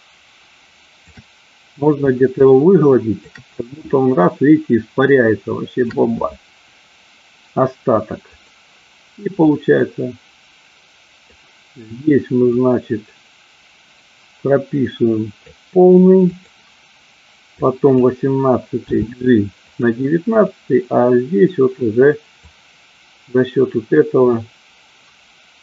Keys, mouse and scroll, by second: 0.0-1.3 shift+drag, 2.5 shift+click, 3.9-6.1 shift+drag, 8.4 click, 9.5-11.4 drag, 12.4-15.7 drag, 17.4 click, 18.8 g, 20.6 drag, 22.6-25.6 drag.